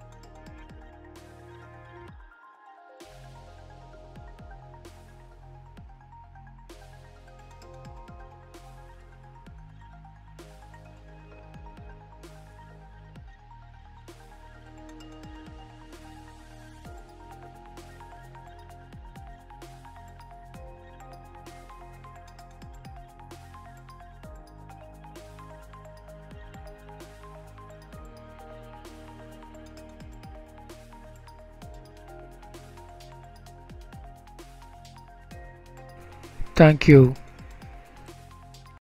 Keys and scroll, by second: 4.1 F11, 8.7 ctrl+shift+s, 10.4 ctrl+shift+a, 10.8 ctrl+shift+b, 13.5 ctrl+b, 17.4 F11, 23.3 ctrl+shift+a, 28.6 ctrl+shift+a, 31.2 ctrl+shift+s, 34.3 F11.